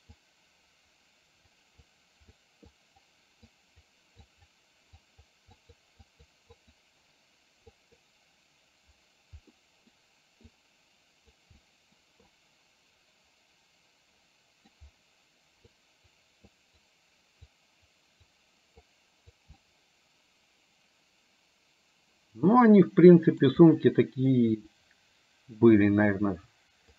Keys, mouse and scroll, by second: 0.2-1.6 drag, 1.8 click, 2.9 click, 3.6 click, 4.3 click, 5.1 click, 5.6 click, 6.1 click, 6.6 click, 7.7 click, 9.6 middle click, 10.5 click, 11.6 middle click, 12.4-14.7 middle drag, 15.7 click, 16.6 click, 17.7 click, 19.0 click, 19.6-23.4 middle drag, 24.3-25.6 middle drag.